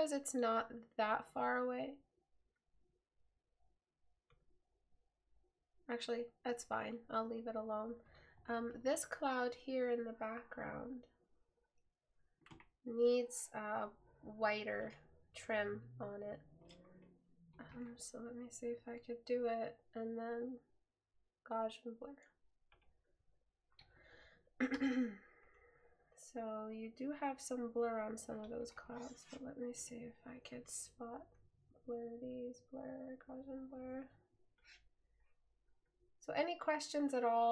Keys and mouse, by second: 24.9 right click.